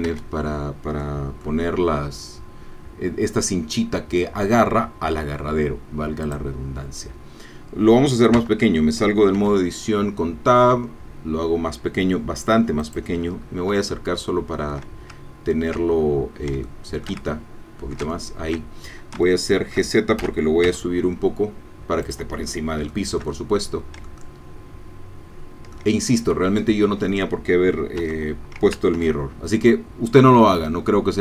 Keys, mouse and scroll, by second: 0.1 shift+Tab, 1.0 middle click, 6.2 click, 8.4 Tab, 9.4 s, 12.8 click, 13.3-13.7 scroll up 1, 13.9-15.4 shift+middle drag, 15.4-16.1 ctrl+scroll down 1, 16.1 ctrl+scroll down 1, 16.6 shift+middle click, 17.3-19.0 ctrl+shift+middle drag, 19.3 shift+middle click, 20.2 shift+g, 20.6 z, 22.1 click, 22.9-26.3 shift+drag, 28.0 Tab, 29.0 ctrl+r, 30.6 middle click.